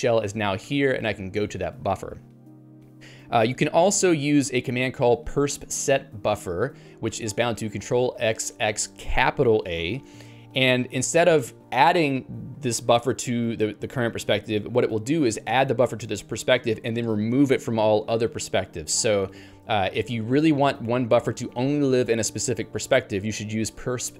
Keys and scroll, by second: 0.6 Return.